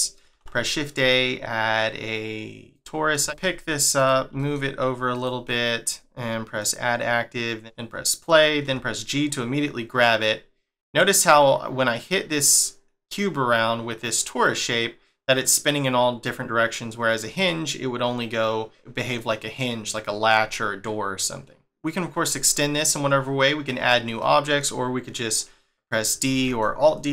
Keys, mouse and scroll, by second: 0.3 shift+a, 3.1 middle click, 3.2 g, 5.4 middle click, 6.5 click, 7.5 click, 8.1 click, 8.6 g, 21.6 middle click, 22.3 shift+middle click, 23.2-24.2 scroll up 1, 24.2 middle click.